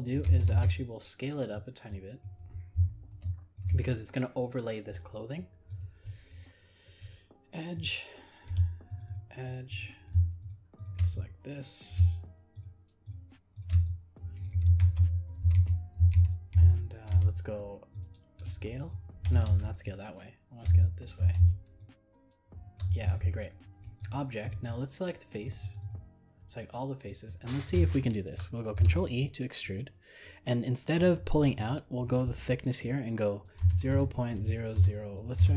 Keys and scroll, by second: 19.5 ctrl+z, 28.7 ctrl+e.